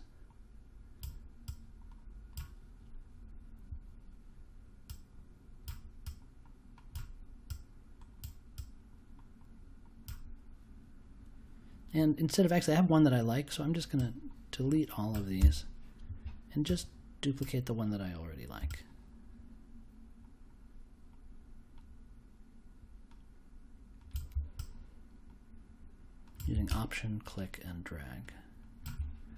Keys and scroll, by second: 15.3 BackSpace.